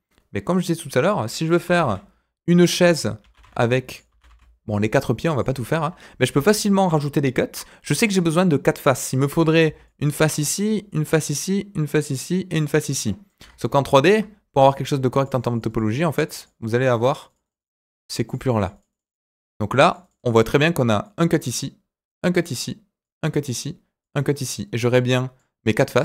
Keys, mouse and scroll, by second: 19.0 click, 19.1-26.0 typing, 19.7 click, 19.9 click, 20.0 click, 20.1 click, 20.3 click, 21.0 click, 22.0 click, 23.0 click, 24.0 click, 25.0 click, 25.9 click.